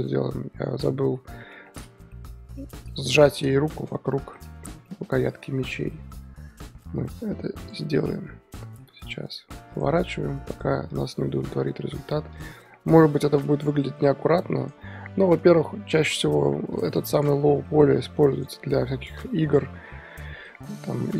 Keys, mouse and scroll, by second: 0.1 ctrl+z, 0.4 ctrl+z, 0.7 ctrl+z, 1.0 ctrl+z, 1.5 middle drag, 1.8-2.1 scroll up 1, 2.1-3.9 middle drag, 3.9 click, 4.1-7.0 shift+middle drag, 7.0 r, 7.8-8.4 middle drag, 8.4 scroll up 1, 8.5 middle click, 9.1-9.8 scroll down 1, 9.8 click, 9.9 r, 11.0 click, 11.2 r, 12.5-14.2 middle drag, 14.2 r, 14.8-15.8 middle drag, 17.2 click, 17.3-17.7 middle drag, 17.7 r, 18.5 scroll down 1, 18.6-21.1 middle drag.